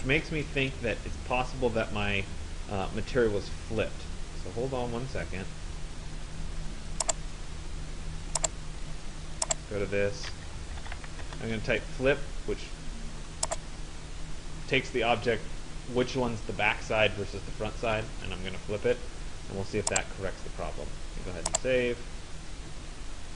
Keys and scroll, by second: 10.9 Return.